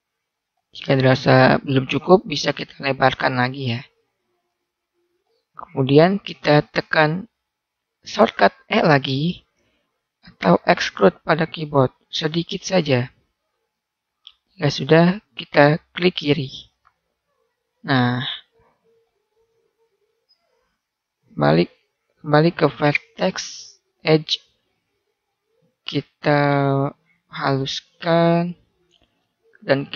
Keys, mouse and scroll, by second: 2.1 s, 4.4 click, 9.5 e, 17.1-18.2 drag, 19.5 click, 20.2-22.0 right drag, 22.0-23.2 middle drag, 23.2 click, 24.5-29.9 middle drag.